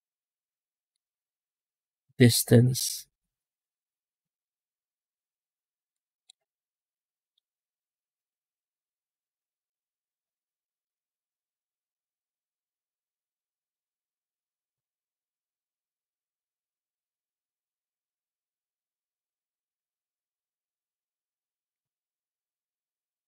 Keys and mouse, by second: 2.0-5.8 drag, 6.8 middle click, 8.0 click, 9.0 click, 9.7 click, 10.8 click, 13.3 middle click, 14.1-15.7 drag, 19.4 click, 20.7 right click, 21.8 alt+shift+z, 22.3 alt+shift+z.